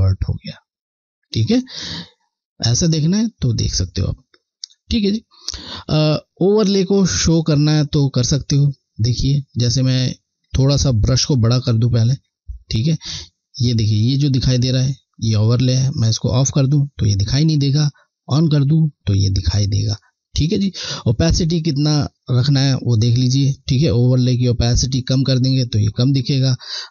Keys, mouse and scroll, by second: 2.8 click, 11.2 ], 14.8 typing, 16.1 click, 20.0 click.